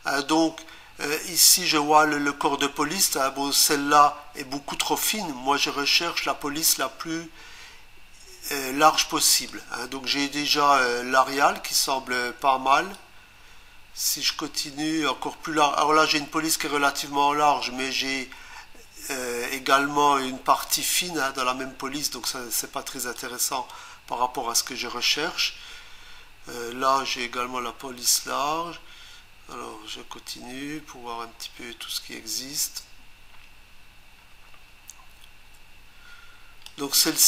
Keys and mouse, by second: 6.7 click, 12.9 click, 23.2 click.